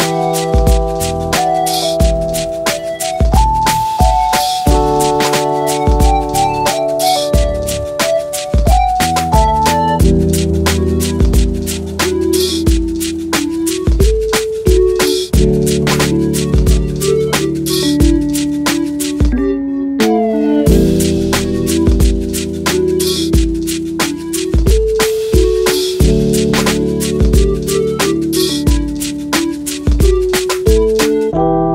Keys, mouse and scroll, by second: 1.3 middle drag, 2.1 middle click, 4.1 right click, 4.9 2, 6.6 right click, 7.6 middle click, 8.8 middle click, 9.7 alt+shift+click, 11.7 alt+shift+click, 12.1 alt+shift+click, 13.8 shift+g, 18.3 alt+click, 20.8 ctrl+b, 23.4 right click, 24.4 ctrl+KP_Subtract, 26.0 s, 27.0 click, 27.4 ctrl+Tab, 29.0 ctrl+z, 30.2 ctrl+r, 31.3 click.